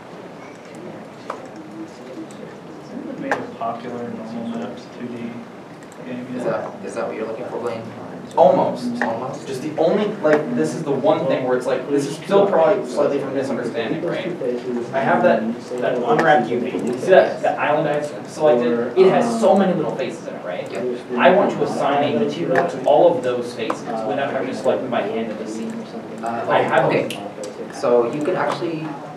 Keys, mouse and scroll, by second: 2.4 shift+click, 2.4-2.8 scroll down 1, 3.3 middle click, 4.1 alt+a, 4.2-4.5 scroll down 1, 4.5 middle click, 11.2 scroll, 11.3 scroll down 1, 11.7 middle click, 12.5 Tab, 14.4 middle click, 15.9 ctrl+s.